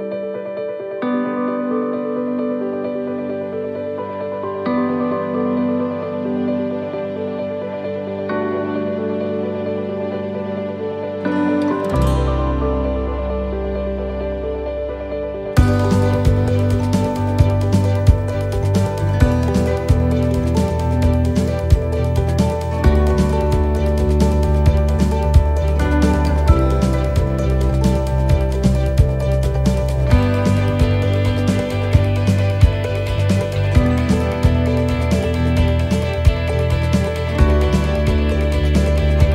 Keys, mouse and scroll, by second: 1.2 right click, 2.6 shift+right click, 3.6 s, 6.7 click, 12.4 s, 13.1 right click, 13.7 shift+right click, 14.5 s, 18.2 shift+middle click, 19.8 right click, 20.7 shift+right click, 21.8 s, 25.5 right click, 26.7 shift+right click, 27.9 s, 30.4 middle click, 31.4-32.0 scroll down 2, 31.9 middle click, 32.9 middle click, 33.9 middle click, 34.8 scroll down 3, 35.3 middle click, 35.8 scroll up 3, 36.5 right click, 37.4 l, 38.8 click, 39.2 middle click.